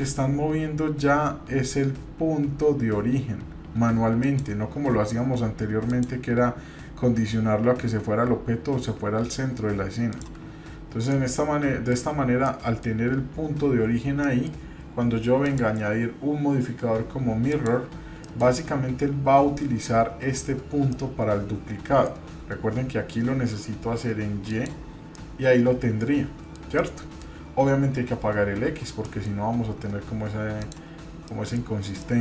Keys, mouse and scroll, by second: 5.9-10.4 drag, 10.6-11.6 scroll down 2, 11.1 middle click, 12.1 scroll up 1, 12.4 middle click, 13.0-13.5 scroll up 2, 13.9 scroll down 1, 14.2 middle click, 15.4-17.6 drag, 18.2 middle click, 18.4-18.9 scroll down 1, 20.9-22.1 middle drag, 24.5 click, 25.1-26.6 middle drag, 26.8 middle click, 29.0 middle drag, 29.4-30.6 scroll up 1, 30.6-31.0 scroll up 1, 31.0 scroll down 1, 31.2 middle click, 31.6-32.0 scroll down 2, 32.0-32.2 middle drag.